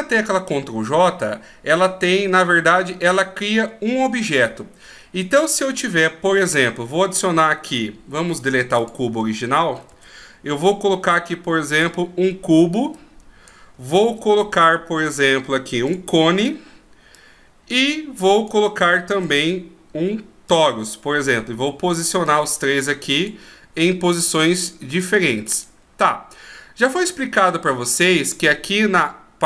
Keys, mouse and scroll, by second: 8.2 x, 9.9 shift+a, 12.9 click, 14.0 shift+a, 17.1 click, 19.1 shift+a, 22.2 click, 25.0 click.